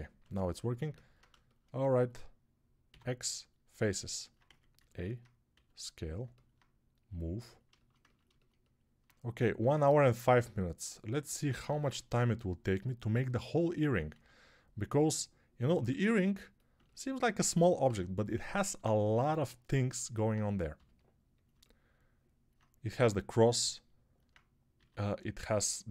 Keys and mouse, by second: 2.7 x, 4.3 a, 5.4 s, 7.6-15.8 ctrl+alt+shift+drag, 14.0 s, 15.8-25.9 alt+middle drag, 17.7 g, 20.6 g, 22.8 g, 24.6 s.